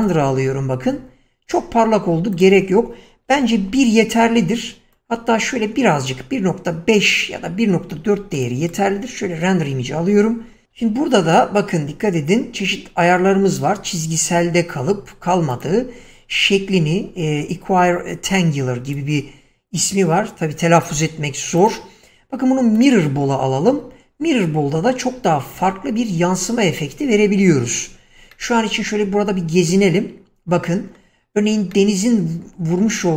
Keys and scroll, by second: 1.9 Escape, 3.6 1, 3.9 Return, 10.8 Escape.